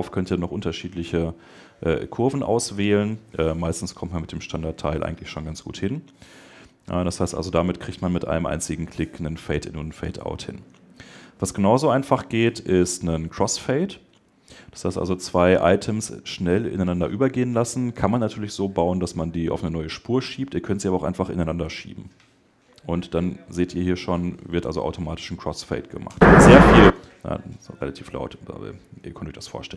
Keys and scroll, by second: 13.8 super+Delete.